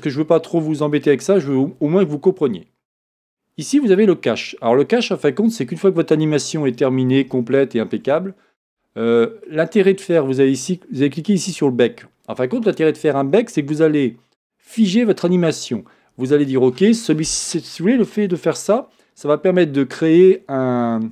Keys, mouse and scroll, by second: 0.6 scroll up 1, 0.7-1.1 scroll down 1, 1.1-1.5 scroll up 1, 4.4-5.1 scroll down 1, 7.4-21.1 shift+middle drag, 8.3-9.2 scroll down 1.